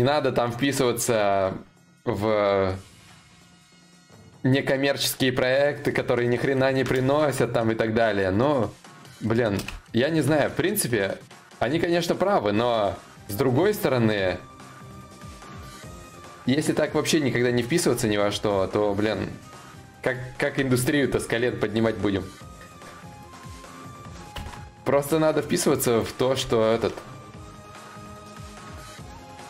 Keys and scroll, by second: 23.9 ctrl+z.